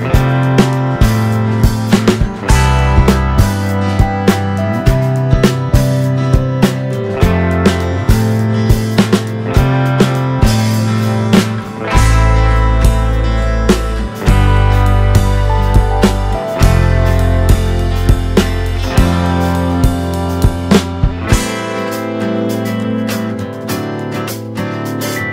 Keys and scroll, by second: 1.3 2, 1.8 5, 2.5 2, 2.8 5, 4.5-12.5 typing.